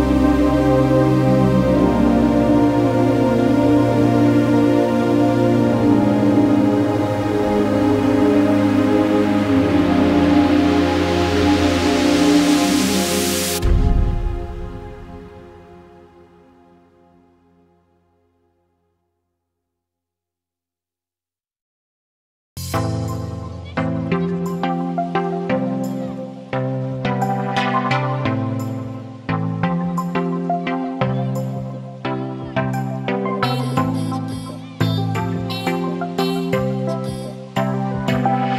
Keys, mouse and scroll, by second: 0.9-3.4 right drag, 3.4-11.3 drag, 11.3-13.1 middle drag, 13.1 click, 14.3-15.4 typing, 16.0 Return, 16.7 o, 16.9 n, 17.2 g, 17.6 shift+>, 20.2-21.8 typing, 23.0-25.0 typing, 26.3 Left, 26.7-27.9 typing, 26.8 Right, 29.8-31.9 drag, 32.2 ctrl+c, 32.5 ctrl+v, 33.1-38.5 drag.